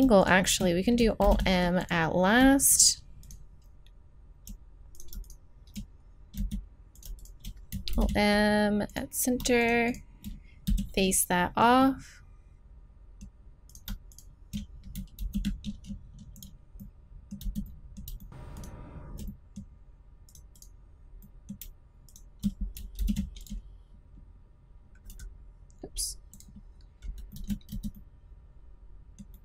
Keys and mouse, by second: 0.2 middle click, 1.2 alt+m, 2.1 click, 2.7-4.8 drag, 6.4 z, 7.9 alt+m, 9.5 middle click, 10.7 f, 11.8 middle click, 12.4 middle click, 13.7-15.2 right drag, 15.2 alt+m, 15.3 click, 17.4 z, 18.3 z, 22.1 click, 23.0 alt+m, 27.7 super+z, 28.5 middle click, 28.9 middle click, 29.2 middle click.